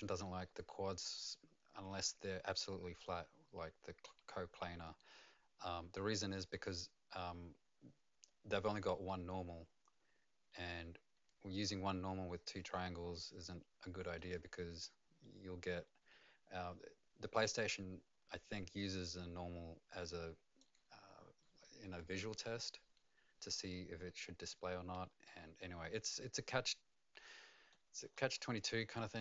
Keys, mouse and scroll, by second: 1.9 middle click, 13.1 middle click, 14.3 right click, 20.6 middle click, 20.6 right click, 25.8 middle click, 28.1 middle click, 28.9 right click.